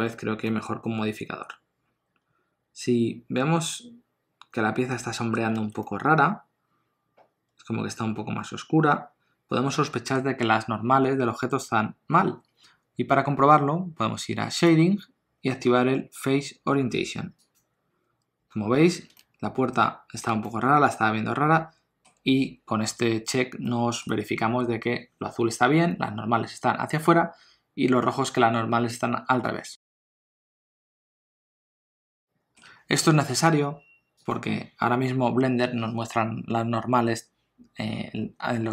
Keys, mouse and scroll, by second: 0.4 middle click, 5.5 alt+a, 5.8 middle click, 14.5 click, 19.1 ctrl+middle click, 20.4 middle click, 23.6 middle click, 30.3 click, 32.2 ctrl+alt+a, 32.2 ctrl+middle click, 34.2 click.